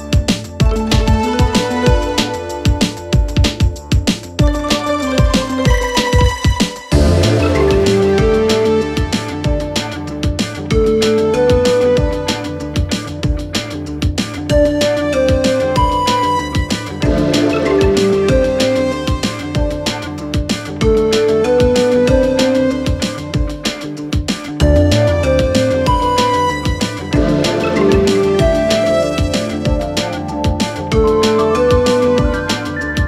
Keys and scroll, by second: 2.2 Delete, 3.2 Delete, 18.0 Escape.